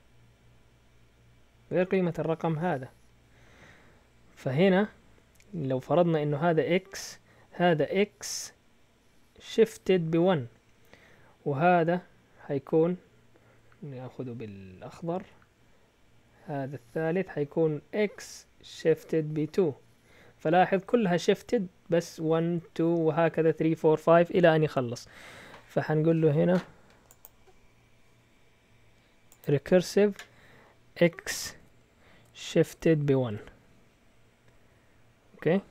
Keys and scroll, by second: 31.6-33.3 typing, 35.4 typing.